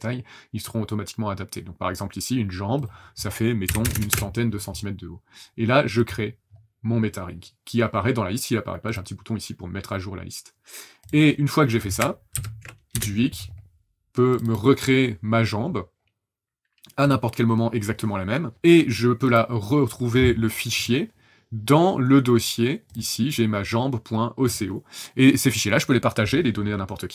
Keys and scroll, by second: 3.6 KP_1, 3.8 KP_0, 3.9 KP_0, 4.1 Return, 12.3 ctrl+n, 12.9 Return.